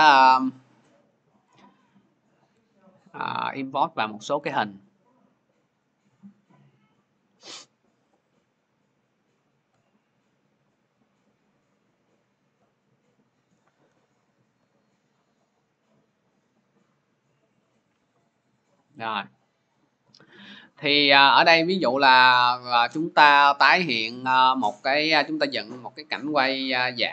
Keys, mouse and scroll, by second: 0.4 click, 1.0 ctrl+click, 1.5 click, 1.9 click, 2.0 click, 3.2 ctrl+click, 4.8 click, 5.8 click, 6.6 click, 6.8 click, 8.6 click, 8.6 click, 10.0 click, 10.9 click, 11.1 click, 11.2 click, 12.2 click, 14.3 click, 15.1-16.6 scroll, 17.4 click, 18.8 click, 20.0 click, 21.3 click, 22.0 click, 22.4 click, 25.0 click.